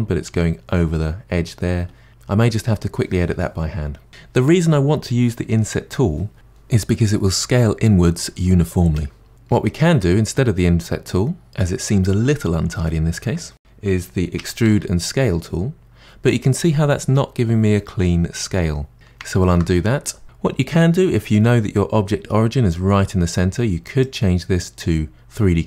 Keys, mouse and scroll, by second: 9.6 ctrl+z, 14.4 e, 19.3 ctrl+z, 24.0-25.6 drag.